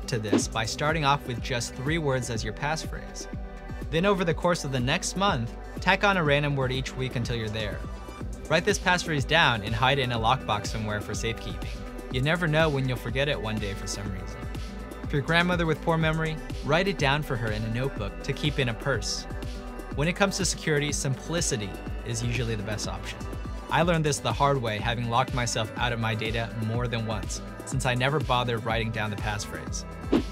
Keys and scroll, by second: 30.2 typing.